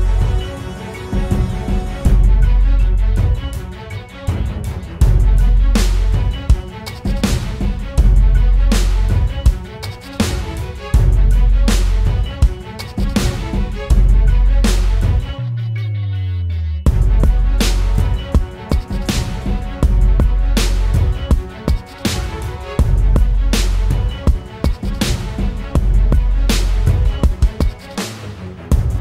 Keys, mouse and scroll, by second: 3.9 double click, 9.7-10.0 typing, 10.5 double click, 22.5-23.2 typing, 24.5 typing, 25.6 typing, 28.4 double click.